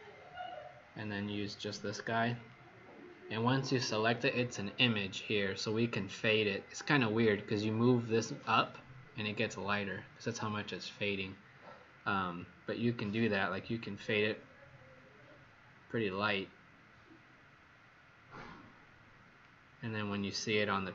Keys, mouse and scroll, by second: 0.1 scroll down 1, 1.7 click, 2.3 click, 5.5 click.